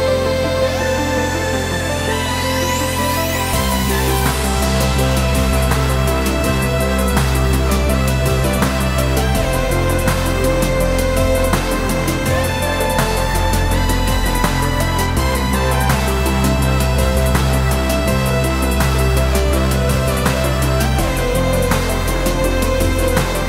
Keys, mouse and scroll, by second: 0.6 click, 1.4 s, 2.7 click, 3.0-3.4 scroll down 2, 3.4 middle click, 3.9-4.2 scroll down 2, 4.2 click, 4.4-5.4 middle drag, 5.4 click, 6.2 s, 8.6 click, 9.1-11.1 middle drag, 9.9 scroll up 2, 11.1 click, 11.3 Tab, 11.9 3, 12.1 click, 13.0 shift+click, 13.5 shift+click, 14.2 e, 16.1 click, 16.7-17.3 scroll down 2, 17.3-19.1 middle drag, 18.0 scroll down 2, 19.1 ctrl+s, 19.9 KP_7, 20.1 middle click, 20.4-20.9 scroll up 2, 20.9 Tab, 21.1 click, 22.1 shift+a, 23.2 s.